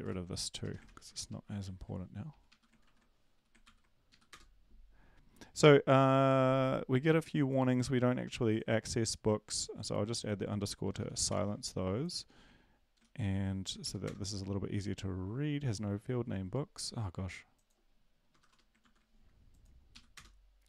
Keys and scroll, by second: 2.8 Up, 2.8 ctrl+`, 3.6 ctrl+l, 4.1 Up, 4.3 Return, 11.0 space, 11.3 ctrl+s, 13.4 ctrl+l, 13.8 Up, 14.0 Return, 18.4 space, 18.8 ctrl+s, 19.9 Up.